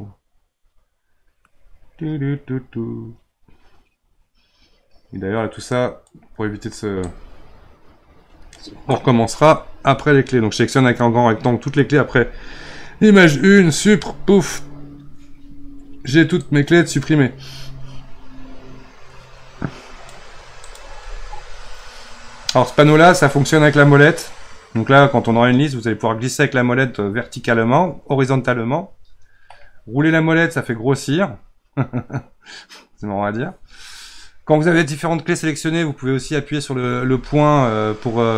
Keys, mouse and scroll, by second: 7.0-10.2 drag, 13.6 Delete, 16.4-19.8 drag, 20.6 click, 23.0-26.4 middle drag, 29.8 scroll up 5, 30.2 scroll down 8, 30.6 scroll up 4, 30.9 scroll down 3, 31.0 scroll up 6, 31.2 scroll down 5, 32.0-34.2 scroll down 1, 34.2-35.0 scroll down 2, 36.9 KP_Decimal.